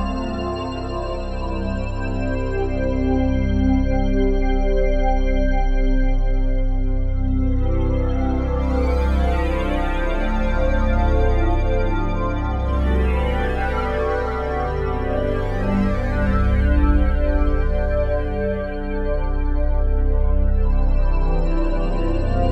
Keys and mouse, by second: 0.2-3.1 drag, 4.3 ctrl+s, 5.9 click, 7.1 click, 8.3-9.2 typing, 11.1 click, 12.5 Escape, 13.2 click, 13.7 click, 17.5 click, 18.7 click, 19.9-22.5 drag.